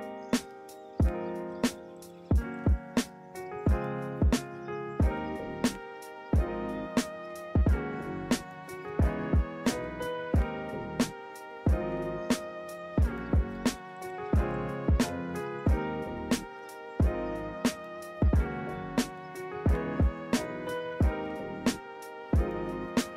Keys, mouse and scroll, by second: 0.7 ctrl+z, 2.0 ctrl+z, 2.2 ctrl+-, 3.3 ctrl+-, 3.4 ctrl+=, 6.2 ctrl+=, 7.7 ctrl+z, 13.7 ctrl+-, 15.0 ctrl+-, 15.2 ctrl+=, 21.1 ctrl+-, 21.5 ctrl+=, 21.7 ctrl+-, 21.9 right click.